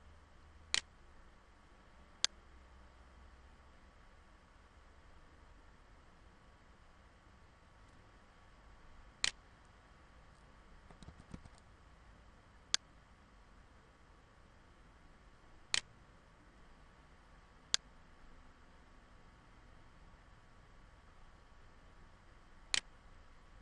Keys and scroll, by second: 10.6 ctrl+z.